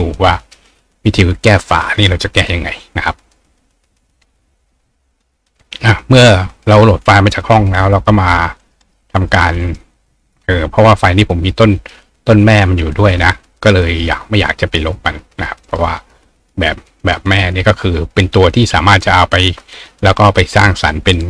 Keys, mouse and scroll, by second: 8.0 click, 8.3 right click, 8.6 right click, 8.8 right click, 9.6 right click, 10.5 click, 14.1 click, 15.6 right click, 19.7 click.